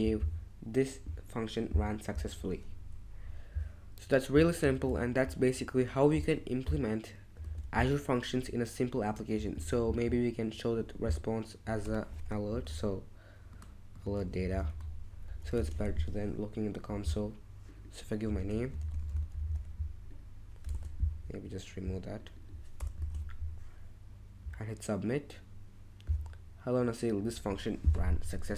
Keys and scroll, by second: 4.7 super+Tab, 7.4 super+Tab, 9.6 super+Tab, 12.2-15.1 typing, 15.5 super+Tab, 18.5-20.0 typing, 20.7 super+Tab, 22.8 BackSpace, 23.0 super+Tab.